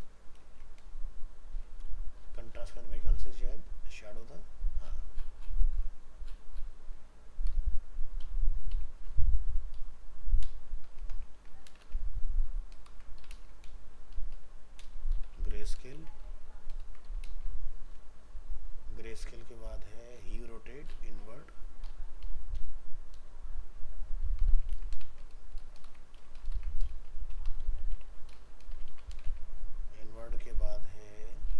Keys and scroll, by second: 0.4 ctrl+space, 11.4 ctrl+c, 11.8 ctrl+v, 12.9 ctrl+shift+Left, 13.3 ctrl+space, 15.5 ctrl+c, 15.9 ctrl+Return, 16.0 ctrl+v, 16.8 ctrl+shift+Left, 17.3 ctrl+space, 24.7 ctrl+c, 25.0 ctrl+v, 25.8 ctrl+shift+Left, 28.9 ctrl+c, 29.2 ctrl+v.